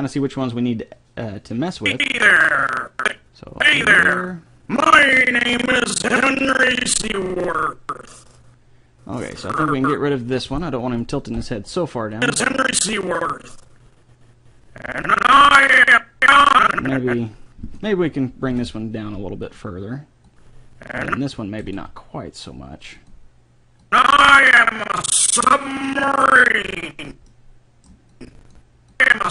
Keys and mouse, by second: 1.8-2.9 drag, 10.5 right click, 11.3 Delete, 12.3 click, 18.6 r, 20.3-21.9 drag, 21.6 r, 23.9-25.6 drag, 28.3 click.